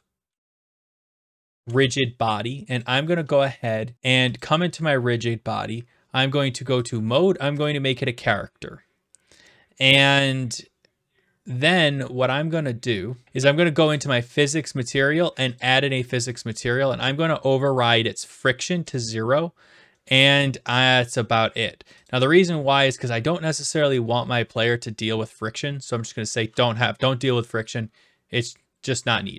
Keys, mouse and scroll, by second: 0.0-2.1 typing, 3.6 click, 4.4 click, 6.9 click, 7.7 click, 14.0 click, 15.6 click, 17.5 click, 19.0 click, 22.0 click.